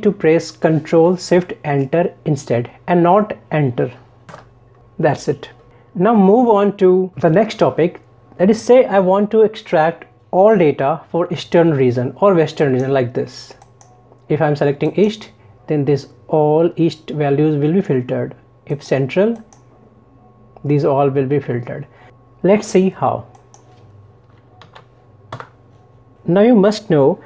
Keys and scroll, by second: 4.3 ctrl+shift+Return, 24.7 ctrl+shift+Down, 26.2 ctrl+shift+Right.